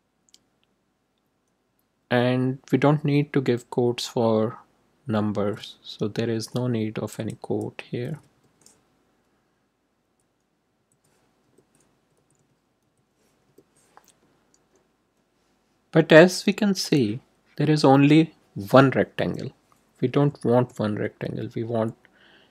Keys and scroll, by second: 1.1 Up, 1.8 Down, 4.9 Right, 7.1 Left, 8.3 BackSpace, 10.0 Up, 10.7 Right, 11.4 BackSpace, 11.9 Right, 13.4 BackSpace.